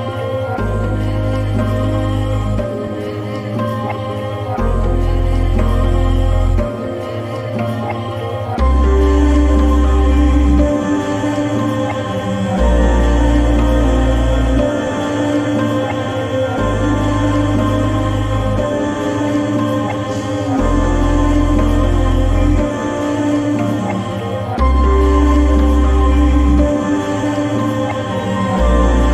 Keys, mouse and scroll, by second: 10.9 shift+f, 11.6 shift+o, 14.5 shift+o, 18.2-20.1 typing, 23.1-25.8 typing.